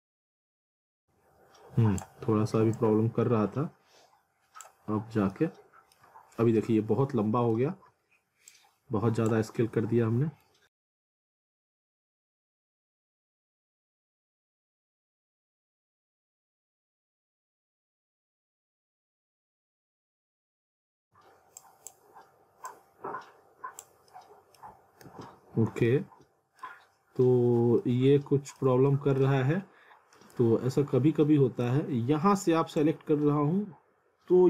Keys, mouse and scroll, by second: 0.0 ctrl+z, 0.1 alt+middle click, 0.5 click, 4.9 scroll down 1, 5.3 middle click, 8.5 click, 9.8 scroll up 1, 10.4 middle click, 10.9 click, 11.9-12.3 scroll down 1, 12.3 click, 13.7-15.2 typing, 14.5 scroll up 1, 14.6 middle click, 15.3 click, 15.7 scroll down 1, 15.8 middle click, 15.9 ctrl+z, 16.9 click, 17.6 scroll up 1, 17.8 scroll down 1, 18.1 click, 18.7 scroll down 1, 18.9 scroll up 1, 19.2 click, 20.9 scroll up 1, 21.6 click, 24.1 middle click, 24.6 scroll up 1, 25.1 ctrl+z, 25.5 scroll down 1, 25.9 alt+middle click, 27.8 alt+middle click, 28.9 alt+middle click, 32.8 click.